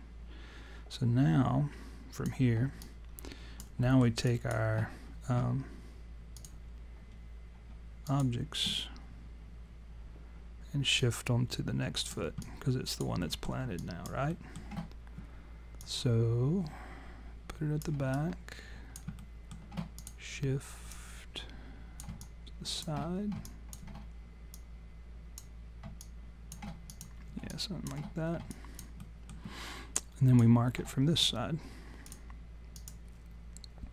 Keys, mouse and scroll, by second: 2.8 alt+click, 3.9 alt+middle click, 4.3 alt+click, 6.4 click, 8.1 shift+click, 11.0 click, 12.4 alt+click, 13.2 alt+middle click, 13.8 alt+click, 14.3 alt+middle click, 15.8 click, 18.1 alt+click, 19.2 alt+middle click, 20.0 click, 20.9 click, 22.2 alt+click, 22.4 alt+click, 23.5 click, 24.5 click, 26.0 alt+click, 26.9 click, 27.5 alt+click, 28.5 alt+click, 29.0 alt+middle click, 29.9 alt+click, 32.1 click, 32.7 click.